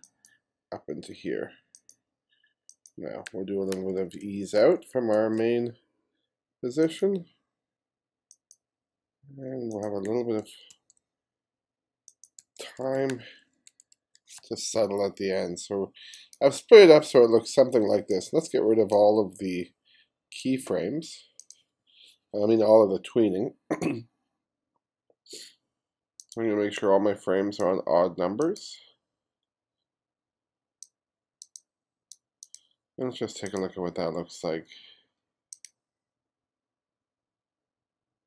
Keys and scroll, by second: 3.7 shift+=, 10.8 shift+=, 12.4 shift+=.